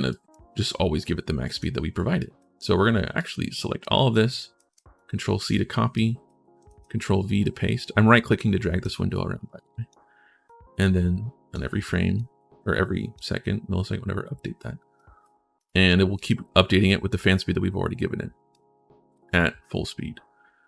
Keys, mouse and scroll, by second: 1.2 right click, 2.0 right click, 2.9 click, 4.3 ctrl+c, 4.7 right click, 5.7 right click, 7.2-8.6 right drag, 8.9 click, 8.9 right click, 10.2-11.3 drag, 10.2-11.3 right drag, 12.0 click, 14.7 right click, 15.3 right click, 15.9 right click, 18.3 click.